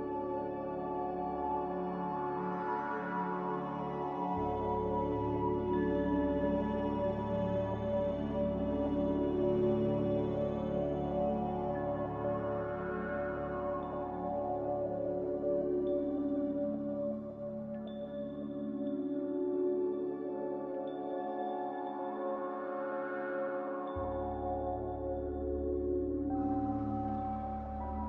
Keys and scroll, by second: 4.2 z, 5.7 m, 7.0-7.7 typing, 12.7 ctrl+b.